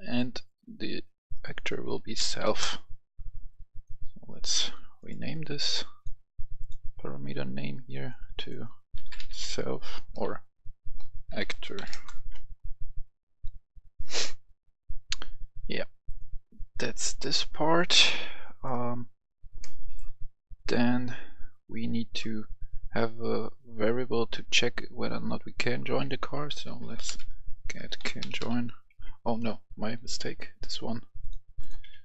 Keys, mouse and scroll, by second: 1.9-2.3 typing, 2.3 Return, 3.4 click, 8.9-11.7 typing, 11.8 Return, 13.2 click, 17.1 right click, 17.7 click, 18.3 right click, 19.0 scroll up 1, 19.5-22.8 right drag, 24.2 click, 26.5-28.3 typing, 29.7-30.8 drag, 30.4 Delete, 31.1 click, 31.7 Delete.